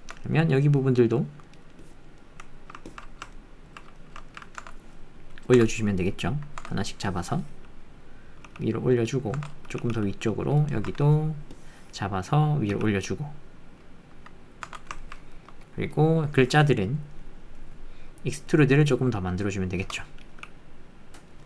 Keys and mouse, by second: 0.0 Tab, 0.5 click, 1.4 click, 2.2 click, 2.3 middle click, 2.4 alt+click, 2.9 ctrl+click, 3.3 ctrl+click, 4.0 shift+click, 4.2 ctrl+click, 7.0 click, 8.5 g, 9.3 Tab, 9.7 g, 10.7 Tab, 11.6 click, 12.7 g, 14.6 Tab, 15.0 ctrl+click, 15.3 shift+click, 18.5-19.7 shift+drag.